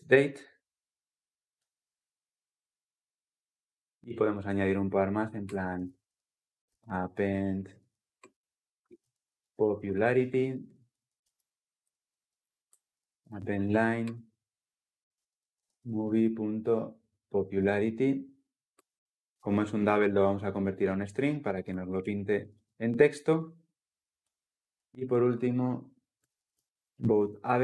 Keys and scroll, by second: 1.3 Return, 18.5 Return, 22.2 ctrl+alt+l, 22.4 ctrl+alt+o.